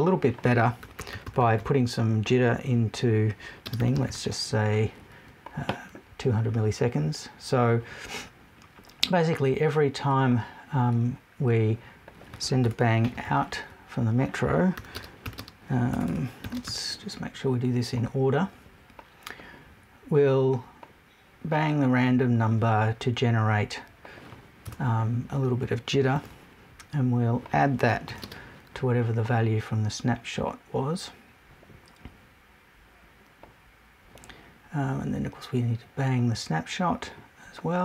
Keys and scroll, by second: 12.6 BackSpace, 13.1 super+BackSpace, 15.9 BackSpace, 24.6 BackSpace.